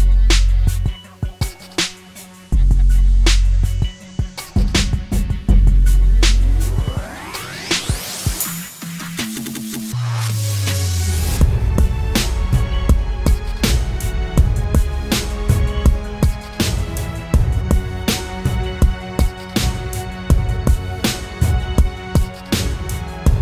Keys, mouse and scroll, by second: 9.5-10.4 scroll up 1, 10.4-10.8 scroll down 1, 17.1 ctrl+t, 20.3 alt+shift+click.